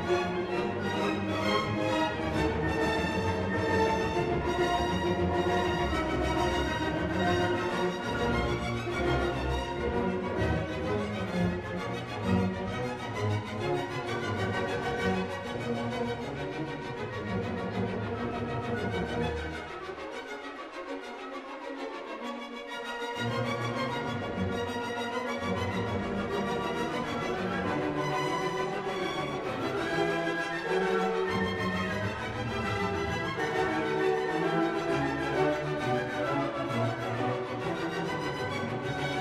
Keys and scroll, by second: 10.1 ctrl+u.